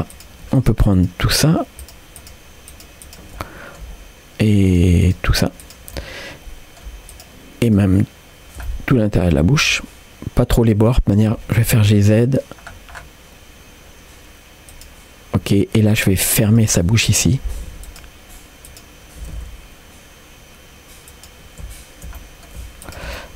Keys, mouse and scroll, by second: 0.1-3.1 drag, 3.4 middle click, 4.7-5.9 shift+drag, 6.0 middle click, 7.1-8.6 shift+drag, 8.6 middle click, 9.2 shift+click, 9.7 middle click, 11.5 g, 15.4 middle click, 16.5 click, 16.8 middle click, 17.6 g, 18.7 click, 19.2 g, 22.2 middle click, 22.9 shift+click, 23.2 middle click.